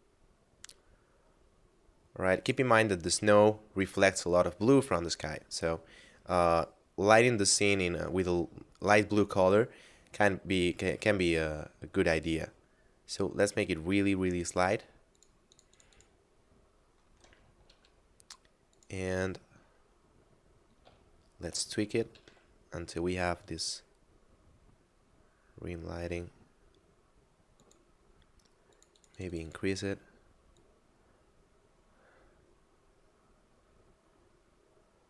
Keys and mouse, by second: 10.5 click, 15.2 click, 17.7 r, 18.8 click, 21.2 shift+middle click, 21.8 r, 22.2 z, 27.6 click.